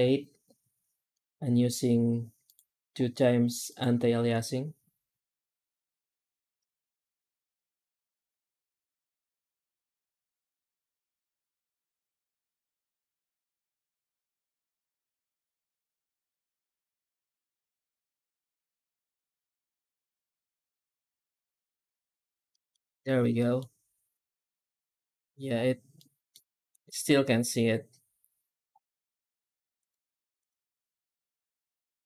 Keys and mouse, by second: 1.1-2.4 drag, 3.5-20.8 drag, 22.4 middle click, 23.3 middle click, 26.0 middle click, 29.7 click.